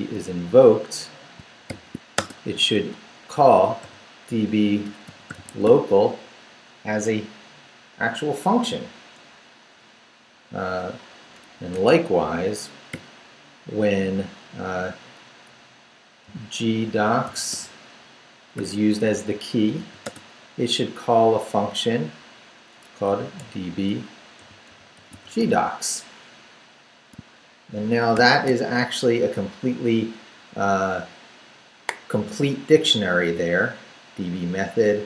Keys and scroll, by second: 0.1 ', 1.7 shift+;, 2.1 shift+space, 3.3-6.1 typing, 11.6 ,, 11.7 space, 12.9 ', 16.2-18.0 typing, 19.8 ,, 20.0 space, 23.1-25.9 typing, 28.1 shift+].